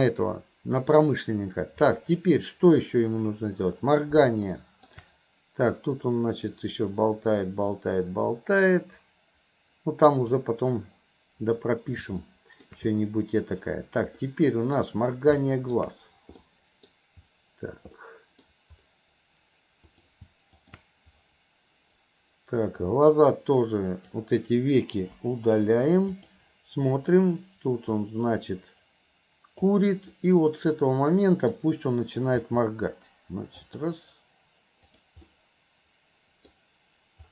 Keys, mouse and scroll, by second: 4.5-4.9 middle drag, 5.9-10.5 drag, 12.3-12.7 middle drag, 14.2-14.8 middle drag, 15.4-15.8 middle drag, 16.5-16.9 middle drag, 18.0 middle click, 19.9 click, 20.7 click, 22.9-24.1 drag, 25.2 Delete, 26.2 click, 28.1-29.8 drag, 30.2-31.6 middle drag, 32.5 r, 35.0 click, 35.3-36.5 middle drag, 36.5-37.3 scroll down 1.